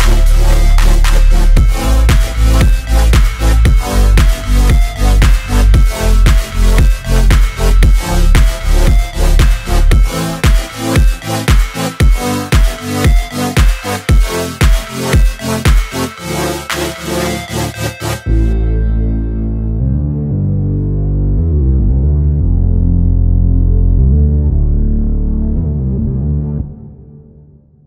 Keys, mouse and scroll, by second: 6.2 alt+F9, 6.5 click, 7.7 p, 8.5 alt+click, 9.3 ctrl+z, 9.9 click, 11.0 shift+Page_Down, 13.2 shift+Up, 15.5 shift+Page_Down, 16.8 click, 17.2 ctrl+c, 17.4 v, 17.9 shift+click, 18.5 shift+Down, 21.2 click, 22.6 shift+Down, 23.9-25.4 shift+drag, 25.4 F9, 27.1-27.8 drag.